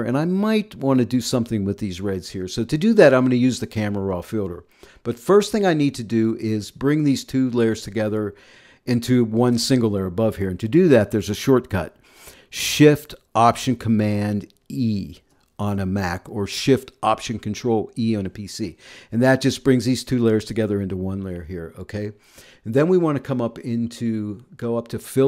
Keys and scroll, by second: 14.7 alt+shift+super+e.